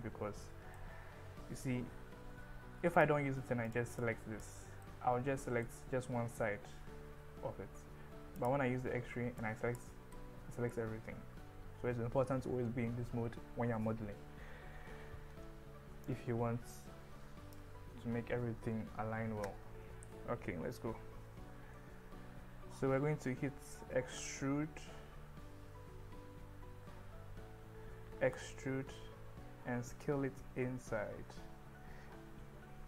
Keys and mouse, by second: 0.8-1.9 middle drag, 1.9 click, 1.9 KP_1, 3.0 click, 3.7 click, 4.2 click, 4.9 middle click, 8.5 click, 8.9 KP_1, 9.5 click, 10.2 middle click, 16.2-17.6 drag, 24.5 e, 27.6 Escape, 28.6 e, 29.0 s.